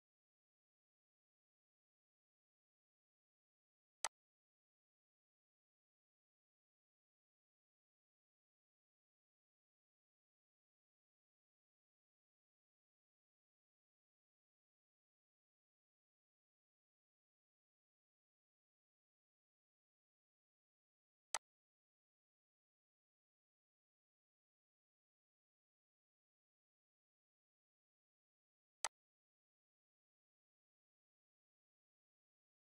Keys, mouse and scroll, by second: 4.0 click, 17.1 alt+Num_Lock, 21.3-26.4 alt+drag, 28.8 click.